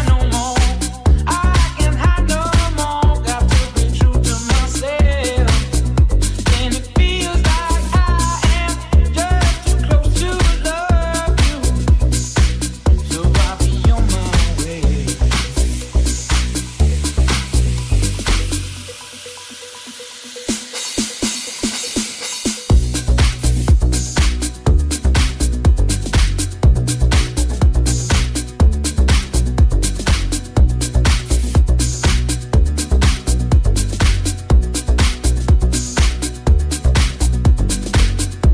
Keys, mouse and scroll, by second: 0.9 c, 4.9 c, 7.4 c, 11.7 c, 13.4 c, 13.6-17.8 shift+right drag, 15.3 c, 17.2 c, 17.2 c, 17.8-22.1 shift+drag, 23.0-29.3 drag, 26.8 c, 29.6 click, 32.2 shift+click, 33.4-35.1 drag, 34.8 c, 35.2 c, 35.5-36.7 drag, 36.8-38.5 drag.